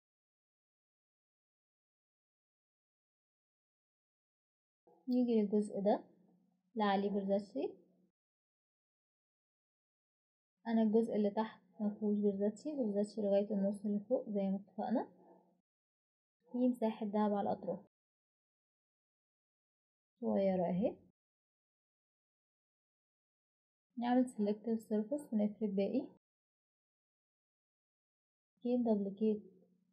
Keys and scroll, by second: 25.7 typing, 28.5 typing.